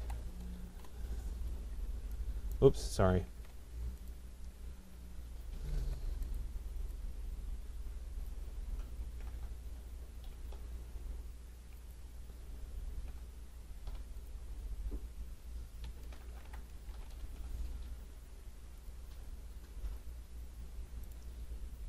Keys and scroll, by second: 0.6 Return, 3.3 ctrl+z, 5.7 Escape, 16.0 Return.